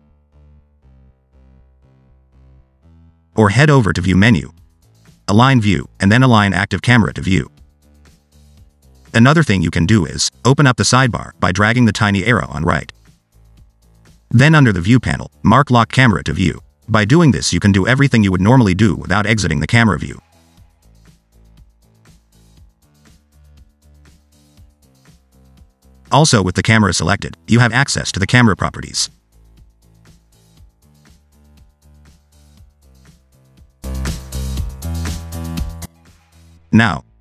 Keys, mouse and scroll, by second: 1.4 scroll down 2, 1.6 middle click, 2.4 scroll down 1, 2.5 middle click, 4.2 click, 8.1-9.7 scroll up 3, 13.6 click, 15.3 click, 16.8 click, 18.1 scroll down 2, 18.3 middle click, 18.7 scroll up 2, 18.9 middle click, 19.6 scroll down 1, 19.6 middle click, 20.1 scroll up 2, 20.3 middle click, 21.0 scroll down 2, 21.1 middle click, 23.4 click, 24.4 n, 26.3 click, 27.7 click, 29.4 click, 31.1 click, 32.7 click, 37.0-37.2 scroll up 3.